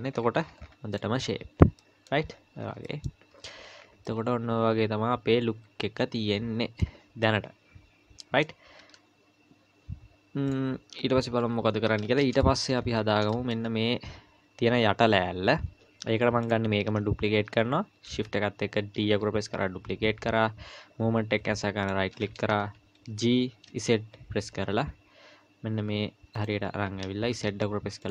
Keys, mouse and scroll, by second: 0.9 click, 1.8 middle click, 1.8-2.8 scroll down 4, 2.8 middle click, 3.3 z, 3.8 scroll down 2, 4.1 middle click, 6.2 middle click, 6.3 middle click, 7.2 middle click, 8.8 z, 11.4 KP_1, 12.0-12.3 scroll down 2, 12.4 shift+middle click, 12.8-13.2 scroll up 4, 13.3 shift+middle click, 16.4 click, 19.0 shift+d, 23.1 g, 27.3 z.